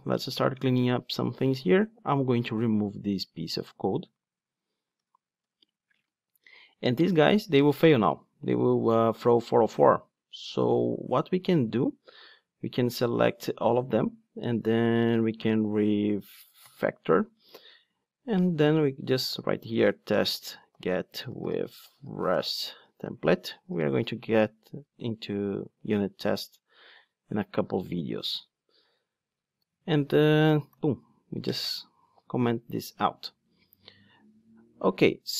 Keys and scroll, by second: 16.7 alt+super+m, 30.7 super+/.